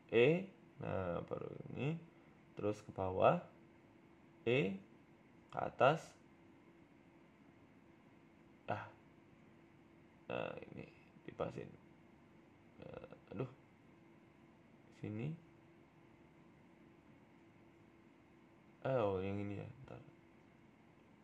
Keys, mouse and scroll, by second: 1.3 e, 1.9 s, 3.8 g, 5.7 e, 5.9 s, 7.0 e, 9.3 KP_1, 9.8-10.7 scroll up 2, 10.7 g, 12.6 g, 13.7 ctrl+r, 14.7 ctrl+z, 15.2 ctrl+r, 16.9 middle click, 18.0 alt+shift+Right, 18.5 ctrl+z, 19.1 alt+shift+right click, 20.6 click, 21.0 a, 21.1 a.